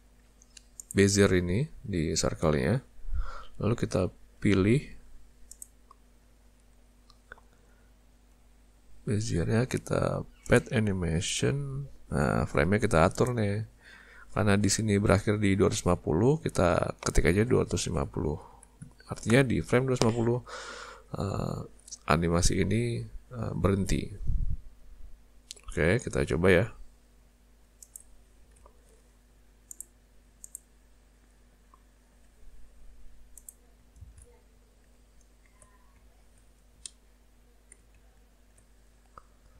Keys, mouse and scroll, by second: 0.8 click, 5.5 click, 10.5 click, 13.2 click, 26.1 z, 28.6 alt+a, 29.7 click, 30.5 click, 33.4 click, 34.0 ctrl+alt+space, 35.0-35.7 ctrl+scroll up 1, 36.1-36.4 ctrl+scroll up 1, 36.9 shift+middle click, 38.1-38.6 ctrl+scroll up 1, 38.8-39.1 scroll up 1.